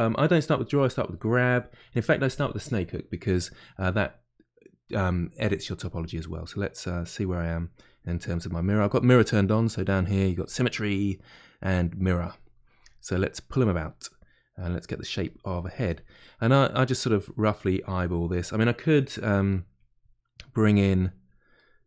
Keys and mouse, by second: 6.8 middle click, 7.4 click, 7.7 middle click, 8.3-9.4 drag, 9.4 middle click, 10.3 click, 10.7-12.2 middle drag, 12.2 click, 12.8 middle click, 13.3 click, 14.0-15.2 middle drag, 15.2-16.4 drag, 16.4 middle click, 16.9 click, 17.8 middle click, 18.3 click, 19.1 shift+middle click, 19.7-21.5 drag, 21.5-21.8 middle drag.